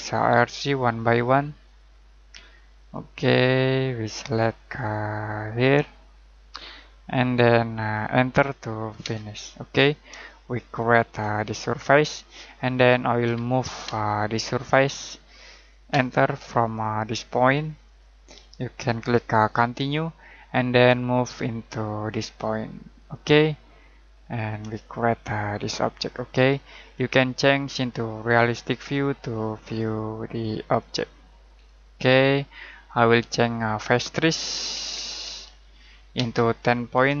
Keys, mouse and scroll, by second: 9.0 space, 10.2 shift+middle click, 12.5 middle click, 13.2 m, 13.8 space, 14.6 click, 15.9 space, 17.8 click, 20.3-20.7 scroll down 1, 20.7 middle click, 21.4-21.8 scroll up 1, 22.9 click, 23.5-24.0 scroll down 1, 24.0 middle click, 24.7 middle click, 27.1 middle click, 29.5 click, 31.8-32.4 scroll down 1, 32.4-33.5 scroll up 1, 33.5 middle click, 34.2-36.9 typing.